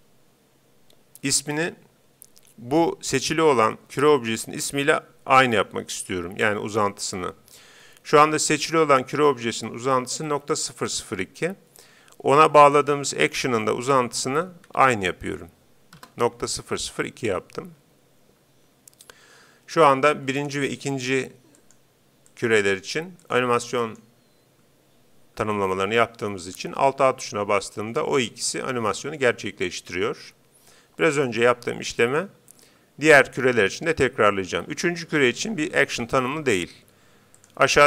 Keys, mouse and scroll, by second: 12.7-14.8 drag, 20.3-22.1 drag, 21.7-25.5 right drag, 27.1 alt+a, 30.5 Escape, 32.0-33.7 right drag, 37.4-37.8 drag.